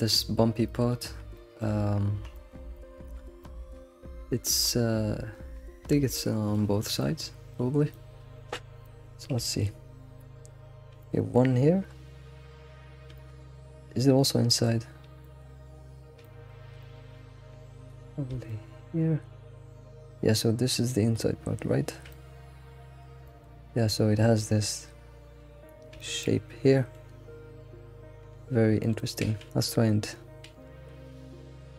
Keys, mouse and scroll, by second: 0.3-0.7 scroll down 2, 0.7-1.8 shift+middle drag, 1.8-2.3 scroll down 5, 2.3 shift+middle click, 3.1-3.8 scroll up 7, 3.4 shift+middle drag, 4.3 scroll up 1, 4.6-8.5 shift+middle drag, 6.7 scroll down 4, 8.5-9.4 scroll up 7, 8.8 shift+middle click, 9.4-12.8 shift+middle drag, 12.8-13.1 scroll down 2, 13.1-13.7 shift+middle drag, 13.7 scroll down 2, 14.0 shift+middle click, 14.8-16.2 scroll down 7, 15.2 shift+middle click, 16.2 shift+middle click, 17.0-18.5 scroll up 11, 17.7 shift+middle click, 18.5-21.5 shift+middle drag, 22.1-23.5 shift+middle drag, 23.5 scroll up 3, 26.0-27.6 shift+middle drag, 27.6-28.8 scroll up 1, 28.9 alt+middle click, 29.4 alt+x, 29.7-30.2 scroll up 3, 30.5 alt+x, 30.9 alt+x.